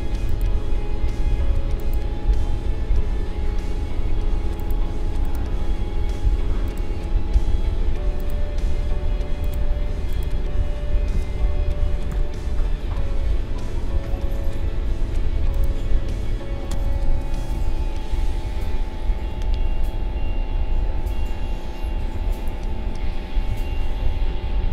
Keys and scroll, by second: 12.1 ctrl+7.